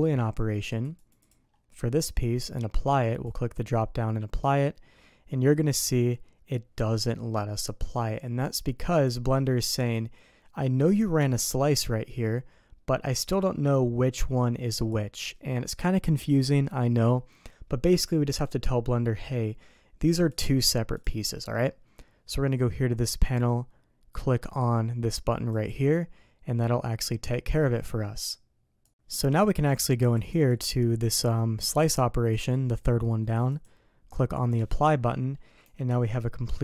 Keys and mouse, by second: 0.4 click, 0.7 click, 1.0 click, 1.2-2.3 drag, 3.1-8.2 drag, 9.0-12.8 drag, 13.4-14.9 drag, 20.3-21.9 drag, 23.1 click, 25.5 click, 30.2 click, 30.5 click, 32.3-32.8 drag, 33.5-34.5 drag, 35.6 g.